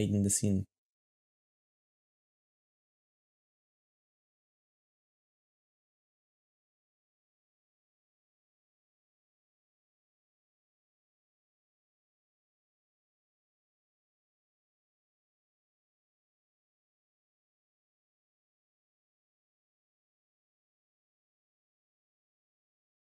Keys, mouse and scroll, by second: 0.4-3.7 typing, 2.8 ctrl+Tab, 2.9 shift+scroll up 1, 6.3-7.2 typing, 8.7-13.5 typing, 9.6 shift+middle click, 14.7 g, 15.9-16.5 typing, 17.5 typing, 19.5 shift+middle click, 19.6 g, 20.7 g, 21.3 g, 22.8-23.0 typing.